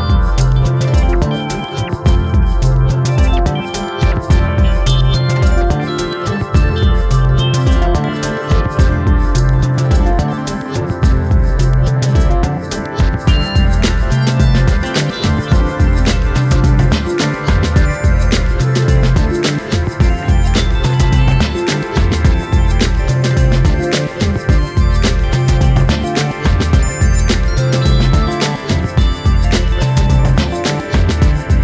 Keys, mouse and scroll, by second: 1.0 click, 2.5 shift+click, 3.1 shift+click, 3.5 g, 4.1-4.4 scroll down 1, 4.4 Tab, 4.6-5.3 scroll down 4, 4.8 click, 5.3-6.0 shift+middle drag, 6.0 scroll down 1, 6.2-6.5 shift+middle drag, 6.5-7.1 scroll up 2, 7.1 scroll up 1, 7.4 click, 7.6 shift+middle drag, 8.0 Tab, 8.4 scroll up 2, 8.6 shift+middle click, 8.8 click, 9.6 click, 10.2 click, 10.7 click, 10.9 alt+/, 11.2-12.2 drag, 12.2 KP_1, 12.7 KP_9, 13.2 KP_Decimal, 13.5-14.5 scroll up 2, 13.7 shift+middle click, 14.5 ctrl+r, 15.4 click, 16.4 click, 16.9 3, 18.2-22.7 drag, 24.0-25.2 drag, 25.2-25.5 scroll down 1, 25.8-26.1 scroll down 1, 26.1 middle click, 26.5-26.8 scroll up 2, 26.8 Tab, 27.0 click, 27.4 click.